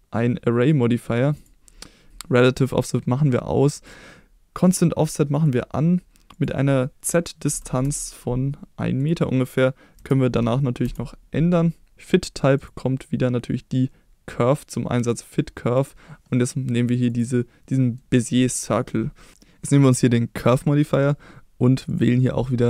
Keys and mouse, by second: 3.8 click, 4.7 click, 5.4 click, 6.4-8.4 drag, 9.2-11.5 drag, 12.6-15.1 drag, 17.7 middle drag, 18.5 middle drag, 19.3-20.4 drag, 21.9 click.